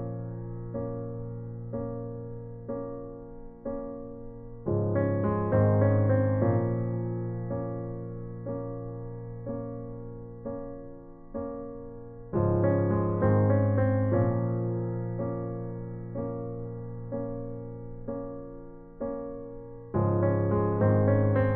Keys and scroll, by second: 5.8-6.1 typing, 7.9 space, 8.9 space, 10.2 ctrl+alt+z, 10.5 typing, 11.7 space, 12.6 space, 14.5-17.2 typing, 21.3-21.5 typing.